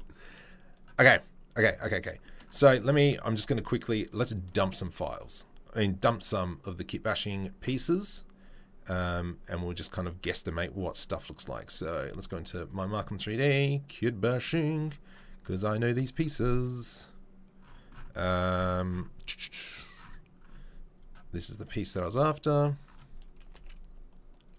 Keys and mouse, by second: 2.5 Tab, 3.9-14.3 drag, 14.3-14.7 middle drag, 14.7 click, 14.8-20.9 middle drag, 20.9 click, 21.0-21.4 middle drag, 21.4-22.5 drag, 22.5-24.5 middle drag, 23.5 s.